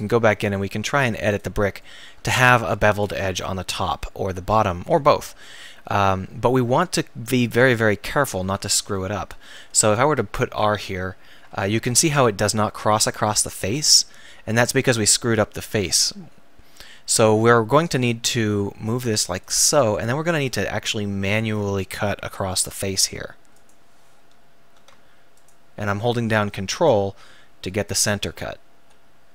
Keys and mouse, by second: 1.3-2.7 drag, 2.7 Tab, 9.9 ctrl+r, 19.6-21.4 drag, 22.6 k.